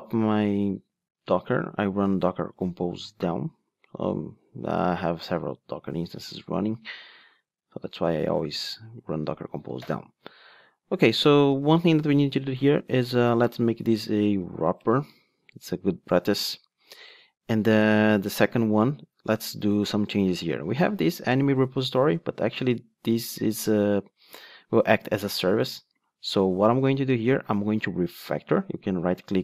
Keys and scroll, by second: 14.8 Return, 29.2 shift+super+k.